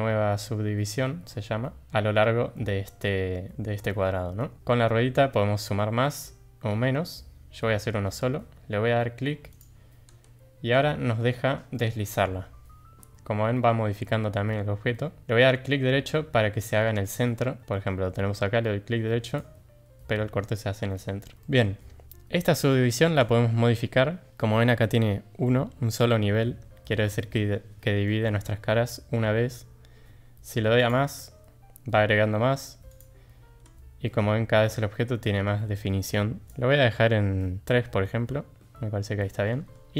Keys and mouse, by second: 21.4 shift+middle click, 28.0 middle click, 30.8 click, 36.5-38.0 drag, 38.0-39.5 middle drag.